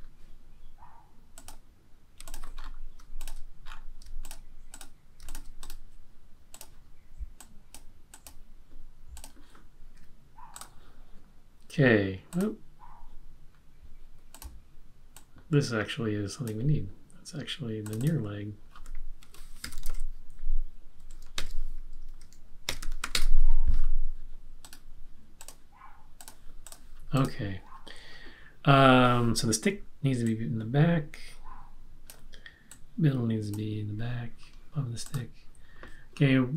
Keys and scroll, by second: 19.4-23.4 typing.